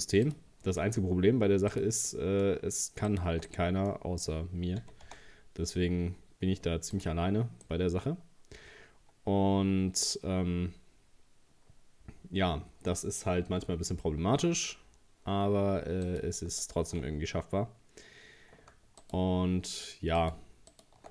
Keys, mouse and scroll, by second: 0.6-1.0 scroll down 2, 1.2 scroll up 2, 1.7 right click, 2.1-3.1 middle drag, 3.1 shift+right click, 3.5-4.8 middle drag, 4.8 g, 7.2-7.6 scroll down 1, 7.6-10.7 middle drag, 14.8 scroll up 1, 16.0 scroll up 1, 16.0 right click, 16.6 alt+shift+right click, 19.0 alt+shift+right click, 20.2 alt+shift+right click, 20.7 alt+shift+right click.